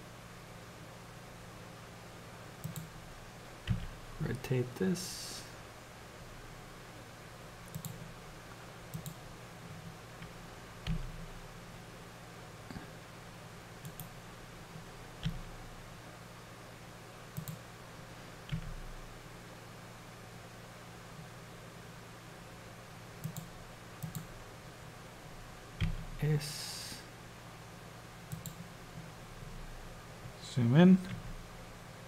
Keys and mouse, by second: 3.8 r, 9.0 click, 10.9 s, 15.5 g, 18.6 r, 24.2-25.9 drag, 25.9 s, 31.3 r.